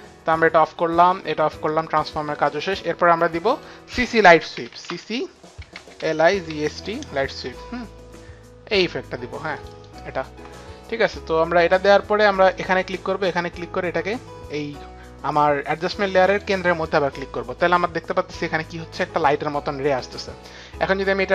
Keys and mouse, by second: 0.2 click, 1.8 click, 4.5 click, 4.5-7.0 typing, 4.7 click, 9.1-10.0 typing, 9.6 click, 12.5 click, 16.2 click, 20.9 click.